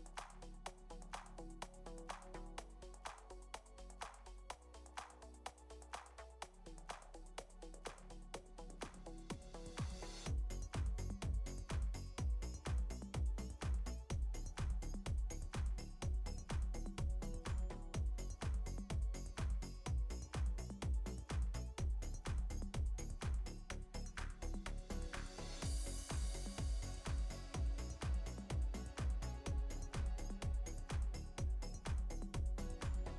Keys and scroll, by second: 2.0 space, 8.4 space, 10.0 space, 10.7 ctrl+z, 11.2 ctrl+space, 16.7 space, 17.5 space, 18.2 space, 19.1 space, 23.1 ctrl+-, 23.7 ctrl+space, 23.8 ctrl+space.